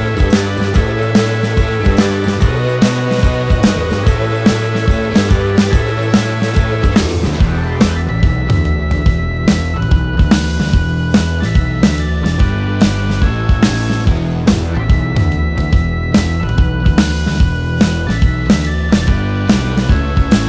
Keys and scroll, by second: 0.3-3.0 typing, 3.1 Return, 5.3 space, 9.3 l, 12.2 1, 13.2 BackSpace, 13.5 ., 14.5-15.9 typing, 18.3 p.